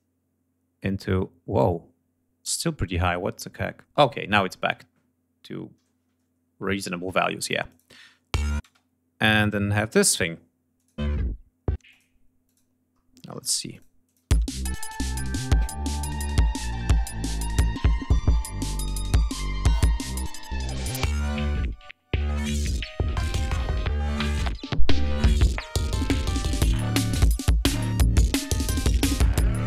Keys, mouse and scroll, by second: 7.3 click, 7.4 space, 8.2 space, 9.6 click, 10.3 click, 10.6 space, 11.4 space, 11.5 click, 12.0 click, 13.3 click, 13.6 click, 13.9 space, 14.2-15.0 ctrl+scroll down 5, 15.5 ctrl+scroll up 1, 16.2 ctrl+scroll down 1, 16.6 ctrl+scroll up 1, 18.7 ctrl+scroll up 1, 22.0 ctrl+scroll down 2, 22.7 ctrl+d, 23.0-23.8 ctrl+scroll up 5, 24.1 scroll down 2, 24.7 scroll up 2, 25.5 ctrl+scroll down 2, 27.9 ctrl+scroll up 2.